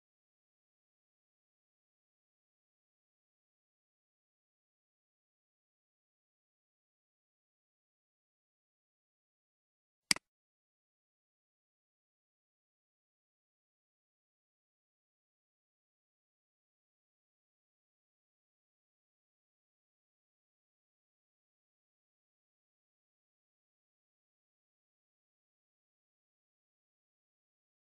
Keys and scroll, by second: 0.2 Right, 2.3 Caps_Lock, 3.2-5.4 typing, 10.8 Caps_Lock, 11.2-12.2 typing.